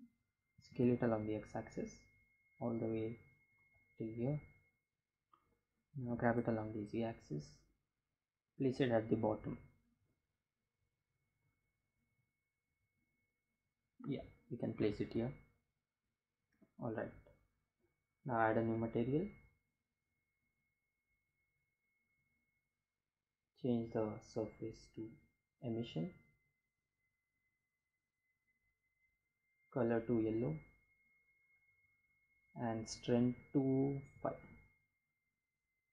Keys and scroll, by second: 4.1 g, 4.3 z, 7.4 Delete, 12.8 g, 12.9 z, 32.2 5, 32.5 Return.